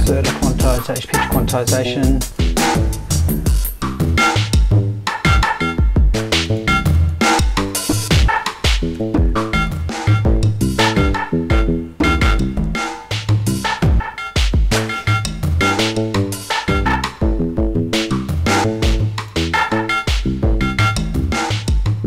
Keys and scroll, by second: 7.7 BackSpace, 7.9 5, 9.0 BackSpace.